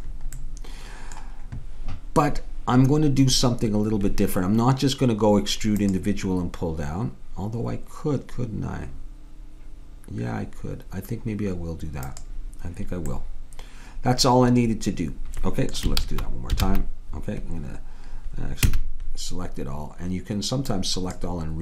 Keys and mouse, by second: 0.4-5.8 middle drag, 5.8-7.6 drag, 13.3-15.1 middle drag, 16.0 ctrl+z, 16.7 ctrl+z, 18.7 a, 20.8-21.6 drag.